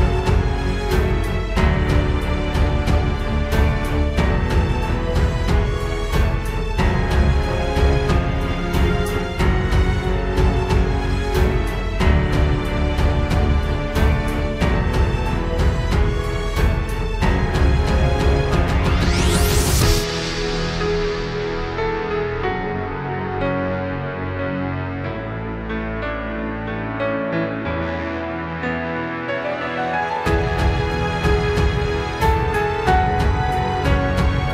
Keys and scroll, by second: 0.0 ctrl+z, 0.9 ctrl+z, 1.4 ctrl+space, 3.2 ctrl+e, 3.4 ctrl+space, 3.6 ctrl+s, 6.4 ctrl+0, 6.6 ctrl+space, 6.9 ctrl+z, 7.4 ctrl+j, 8.0 ctrl+space, 8.4 ctrl+t, 8.8 ctrl+z, 10.4 ctrl+t, 11.9 ctrl+z, 12.6 ctrl+space, 13.1 ctrl+space, 14.6 ctrl+e, 14.8 ctrl+s, 15.1 ctrl+space, 18.2 ctrl+z, 22.5 ctrl+space, 26.9 ctrl+z, 28.5 ctrl+z, 30.1 ctrl+z.